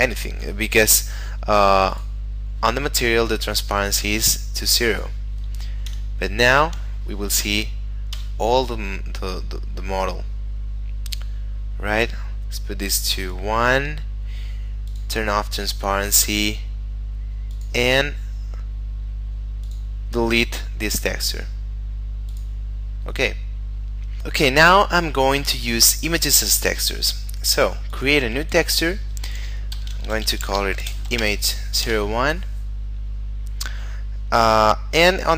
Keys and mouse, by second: 0.1 Escape, 1.9 click, 2.9 middle click, 4.1 click, 5.9 F12, 8.1 Escape, 13.8 middle click, 14.9 click, 18.0 middle click, 19.6 click, 22.3 click, 27.8 click, 29.7-31.2 typing, 31.8 Return, 34.4 click.